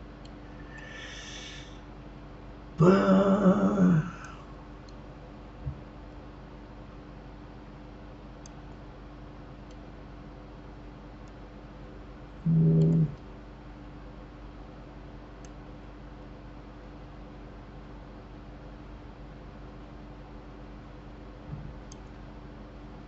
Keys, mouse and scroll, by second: 4.2-7.2 drag, 9.7-12.7 middle drag, 15.4-18.4 drag.